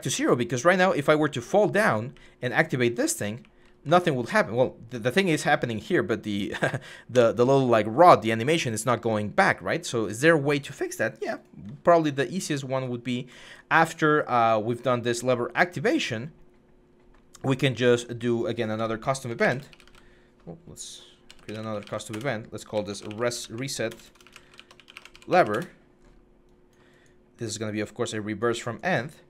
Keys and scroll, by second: 0.0-1.9 typing, 4.7-6.6 typing, 7.0 Escape, 18.6 Tab, 19.1-19.6 typing, 20.8-25.4 typing, 21.9 Return, 25.4 Return.